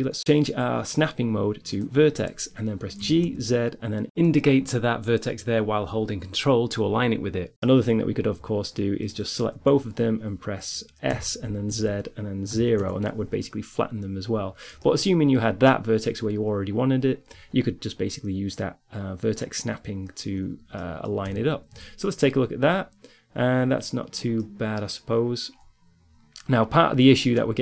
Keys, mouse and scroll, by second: 3.2 g, 6.7-8.5 middle drag, 8.5-10.3 right drag, 10.9 s, 14.8-17.7 middle drag, 19.6-21.0 middle drag, 21.0 Tab, 21.4 z, 23.2 middle click, 23.5 middle click, 24.2 middle click, 26.1 middle click, 26.6-27.6 middle drag.